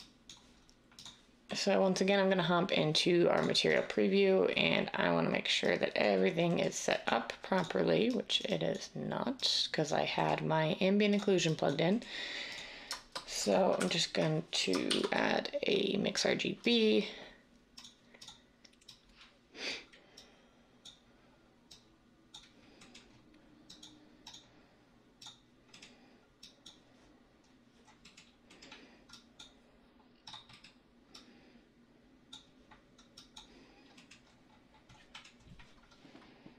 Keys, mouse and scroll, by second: 13.8 m, 14.9 a.